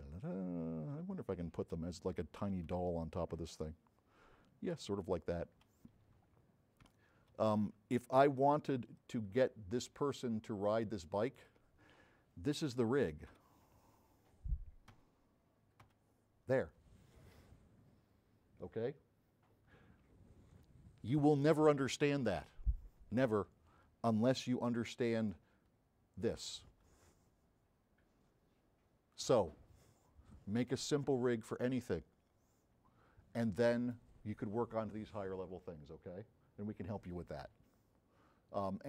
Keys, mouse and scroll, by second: 0.3-0.8 scroll down 2, 2.3 c, 3.1 v, 3.3 click, 6.4 scroll up 2, 7.0 s, 9.0-11.4 right drag, 9.0 s, 13.3 9, 15.1 f, 24.7 s, 25.7 middle click, 25.7 scroll up 1.